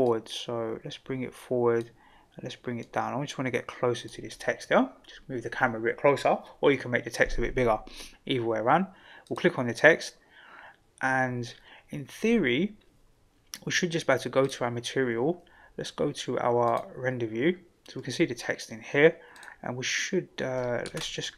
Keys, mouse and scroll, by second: 0.0-1.8 drag, 2.8-4.1 drag, 9.2 click, 14.4 click, 16.7 click, 19.3 click, 20.9 ctrl+z.